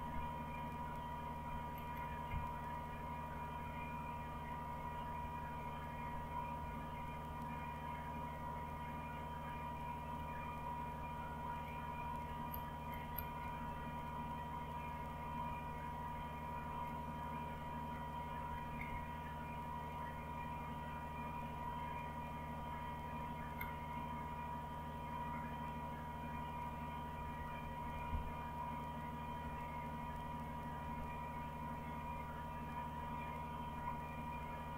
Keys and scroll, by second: 0.0-3.3 typing, 3.6-4.3 Up, 4.7 Up, 5.3-5.8 Up, 6.7 Up, 7.1 Up, 8.6-9.4 Up, 10.2-10.9 Up, 11.9 Up, 12.4 Up, 12.5 Up, 12.9 Up, 13.6 Up, 15.5-16.2 Up, 17.0-17.6 Up, 18.2 Down, 18.5 Down, 18.8 Down, 20.4 Up, 20.8 Up, 20.9-21.4 Up, 22.0 Up, 22.4 Up, 22.5 Up, 23.1 Down, 23.5-26.3 Down, 27.2 Page_Down, 27.4 Page_Down, 27.6 Page_Down, 27.7 Page_Down, 27.9 Page_Down, 29.4 Page_Up, 29.9 Page_Up, 30.4 Page_Up, 30.8 Page_Up, 31.3 Page_Up, 32.4 Page_Up, 33.0 Page_Up, 33.6 Page_Up, 34.3 Page_Up.